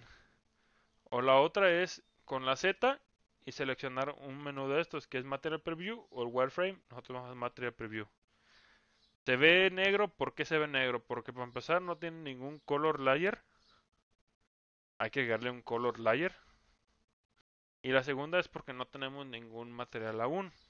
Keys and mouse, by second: 0.5 click, 1.7 z, 9.9 click, 15.7 click.